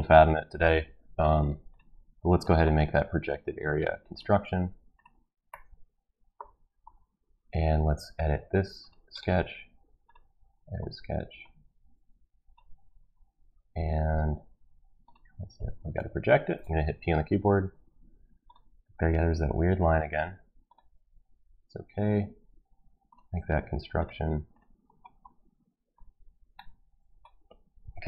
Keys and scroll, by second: 15.9 Escape, 16.9 p.